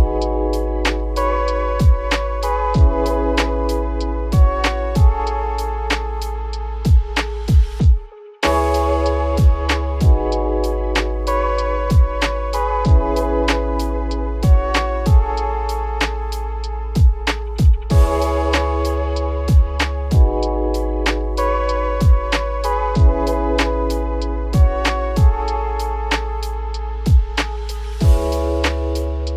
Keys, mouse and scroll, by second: 0.4 ctrl+l, 0.7-1.6 scroll down 12, 1.9-2.7 scroll up 11, 2.7 click, 2.9 scroll down 2, 3.1 z, 4.0 click, 6.8 scroll down 5, 7.6-8.0 scroll down 5, 8.5 shift+middle click, 10.4 middle click, 11.2 click, 12.5-15.9 drag, 18.6 click, 24.2 click, 25.5 click.